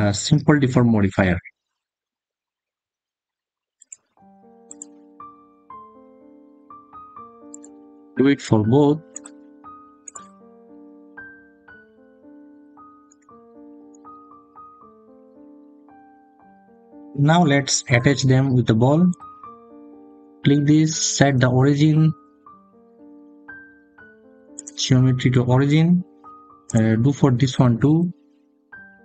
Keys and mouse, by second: 3.7-5.5 drag, 9.0-10.8 drag, 12.9-15.3 drag, 16.7 middle click, 18.9 click, 20.7 click, 21.2-24.8 drag, 27.7-29.0 drag.